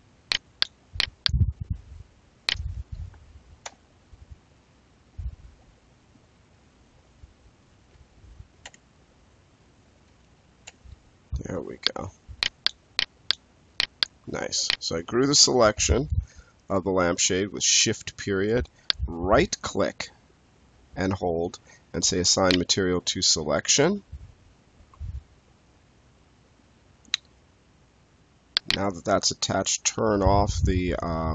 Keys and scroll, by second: 3.5 shift+., 8.5 shift+., 10.6 shift+., 15.7 space, 24.8 space.